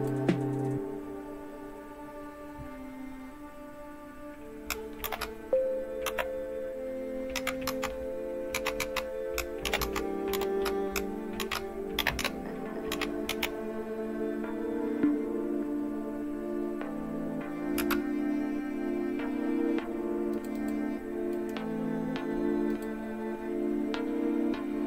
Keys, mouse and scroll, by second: 0.0 click, 5.0 typing, 6.0 typing, 7.3-10.3 typing, 11.4-12.0 typing, 13.2 typing, 17.7 Return, 19.8 click, 20.6 click, 21.4 right click, 22.7 click.